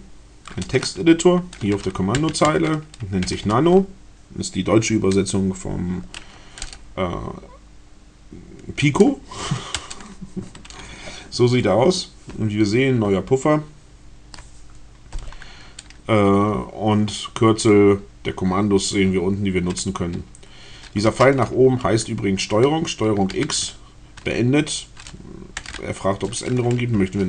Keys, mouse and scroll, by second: 1.9-3.5 typing, 9.7 Return, 20.1 w, 21.0 BackSpace, 23.2 ctrl+x, 26.4 n.